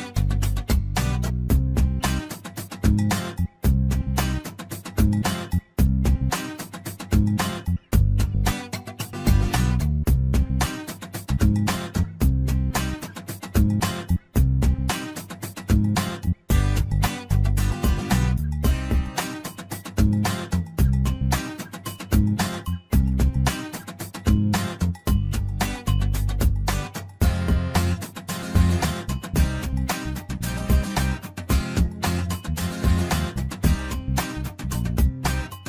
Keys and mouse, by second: 0.7 click, 1.6 shift+middle click, 2.3 click, 2.8 click, 5.8 click, 6.0-7.7 drag, 8.4 click, 9.4-10.4 drag, 11.0 shift+middle click, 11.5 middle click, 12.3 shift+middle click, 12.7 middle click, 13.7 shift+middle click, 14.8 2, 18.1 f, 19.4-21.0 typing, 21.5 middle click, 23.0 shift+middle click, 23.9 shift+middle click, 24.6 1, 24.9 click, 27.4 ctrl+right click, 30.8 shift+middle click, 31.9-35.6 drag.